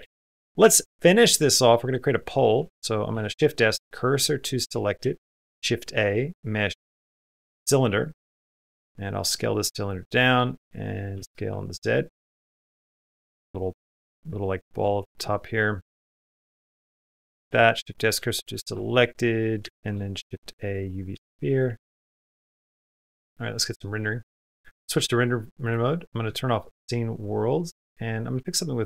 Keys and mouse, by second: 0.4 space, 0.7 middle click, 1.2 middle click, 1.8 middle click, 2.9 shift+s, 4.8 shift+a, 8.6 s, 9.8 middle click, 10.5 middle click, 11.0 s, 12.3 s, 13.2 s, 13.5 shift+middle click, 13.6 middle click, 14.6 Tab, 16.0 click, 16.3 3, 16.5 click, 17.2 shift+s, 18.1 shift+middle click, 19.4 shift+a, 21.0 s, 22.2 middle click, 22.2 space, 22.7 middle click, 24.0 click, 24.2-25.7 drag, 26.2 shift+middle click, 27.1-28.8 drag.